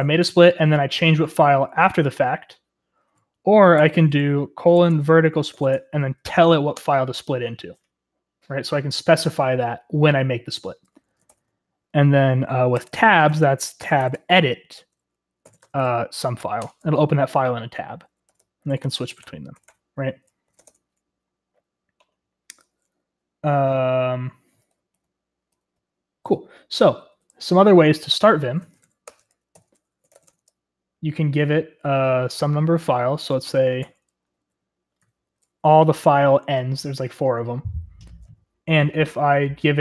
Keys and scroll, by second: 1.7 typing, 3.7-6.7 typing, 10.9-11.7 typing, 12.7-16.6 typing, 18.0-21.0 typing, 24.7-30.9 typing, 33.0-35.1 typing, 36.5 typing.